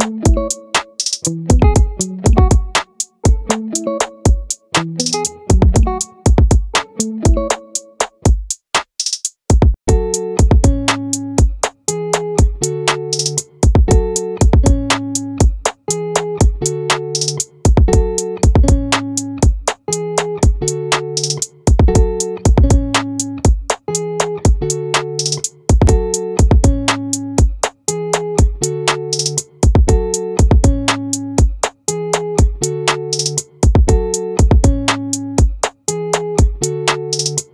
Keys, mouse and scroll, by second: 0.9 z, 4.3 shift+a, 15.6-17.6 drag, 20.6 ctrl+c, 20.6 ctrl+v, 21.4-23.0 drag, 28.8 Tab, 35.7-37.5 middle drag.